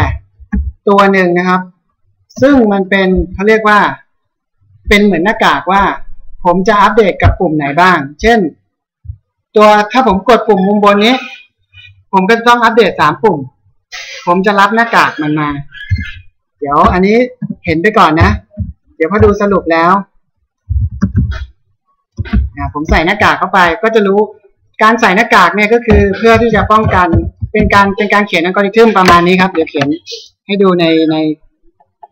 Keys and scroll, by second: 1.9 Tab, 16.5 BackSpace, 25.5 Return.